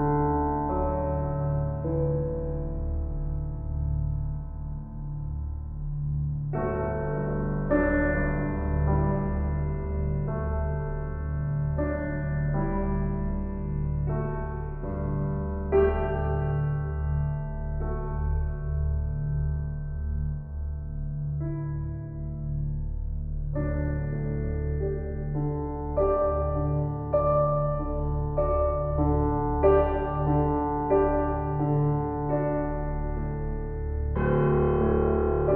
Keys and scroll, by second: 15.9 shift+s, 30.0 shift+s.